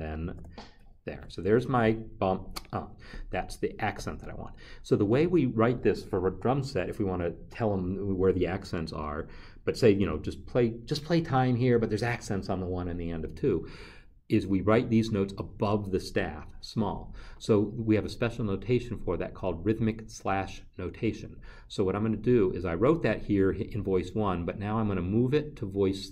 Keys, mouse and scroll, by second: 0.3 0, 1.1 Escape.